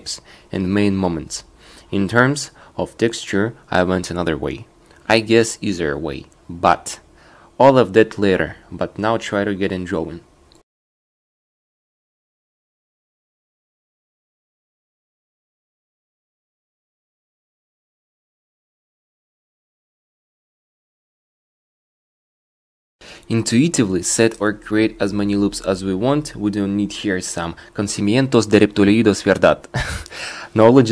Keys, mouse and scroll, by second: 0.0 shift+e, 12.7 click, 13.1 ctrl+r, 13.9 click, 15.0 click, 22.3 ctrl+r, 24.2 right click, 25.5 click, 26.0 right click, 27.2-30.9 drag.